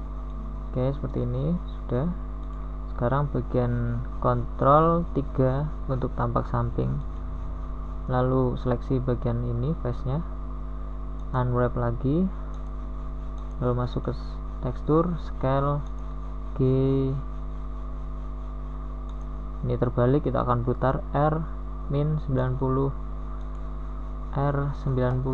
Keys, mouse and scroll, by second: 3.7 r, 6.4 middle click, 11.0 ctrl+KP_3, 16.5 u, 20.0 s, 21.6 g.